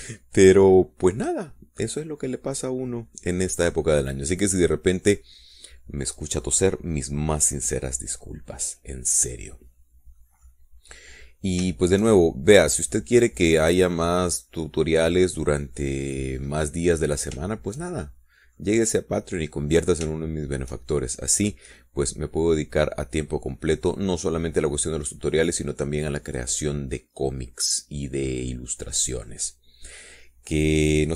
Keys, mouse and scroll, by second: 2.0-2.7 scroll down 2, 2.7 scroll down 1, 2.9-3.4 scroll up 2, 8.7 scroll down 2, 9.2-12.0 middle drag, 12.2-12.5 scroll up 2, 12.5-13.5 scroll down 4, 13.6 shift+middle click, 13.8 shift+click, 13.9 middle click, 14.0 click, 14.0-18.0 middle drag, 18.3 scroll down 2, 18.9-20.2 shift+middle drag, 20.4-21.0 scroll up 2, 21.0-21.4 scroll down 2, 21.6-26.1 shift+middle drag, 26.8-28.2 middle drag, 28.3-28.9 scroll down 1, 29.2 scroll down 1, 29.6-30.9 drag, 30.9 middle click.